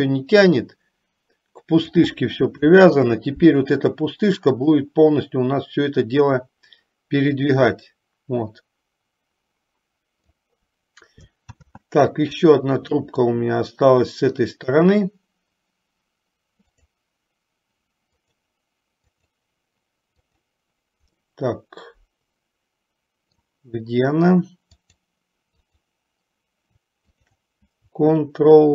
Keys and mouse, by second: 3.1 ctrl+z, 4.7 click, 7.7-10.6 drag, 11.7 ctrl+z, 13.5-15.0 middle drag, 16.8 click, 19.2 click, 20.3 click, 21.5-23.9 middle drag, 25.9 click.